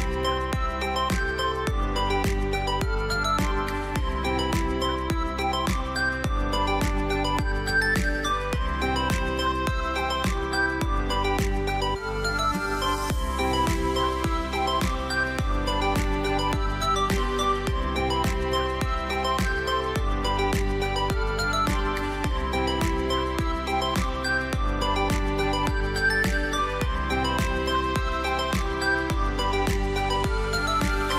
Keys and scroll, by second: 13.3 space, 17.2 space, 20.7 r, 27.0 ctrl+d, 27.5 v, 30.5 o.